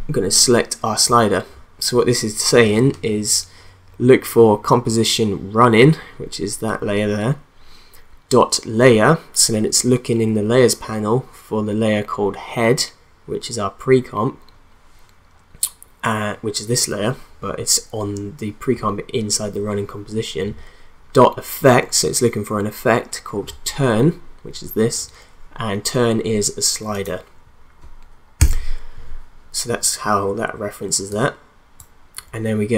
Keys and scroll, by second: 28.4 ;.